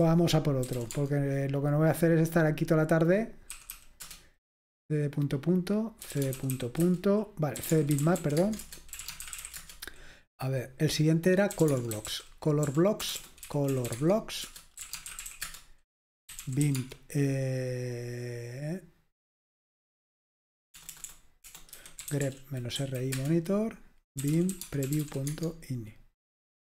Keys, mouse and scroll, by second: 0.2 ctrl+c, 0.2 alt+super+r, 0.7-2.3 typing, 4.0 Return, 4.0 typing, 5.8-10.1 typing, 11.4-17.1 typing, 14.4 Return, 20.8-22.7 typing, 22.8 Right, 23.1 Return, 24.0-25.5 typing.